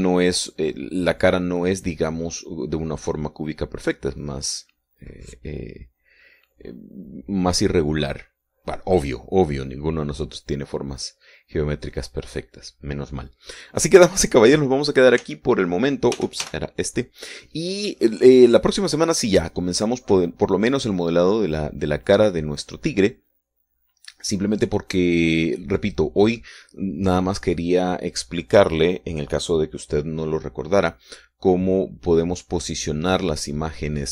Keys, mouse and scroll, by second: 16.7 t, 17.6 t, 18.0 n, 19.4-19.7 scroll down 2, 20.0 scroll up 1.